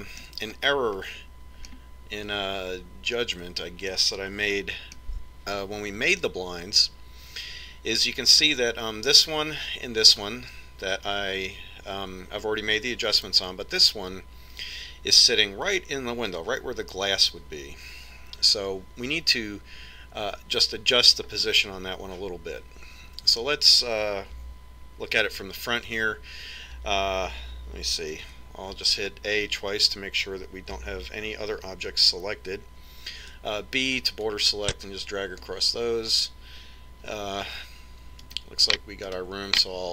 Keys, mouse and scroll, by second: 5.2-7.0 middle drag, 21.8-23.6 middle drag, 28.6 a, 29.1 a, 33.6 b, 38.6 right click.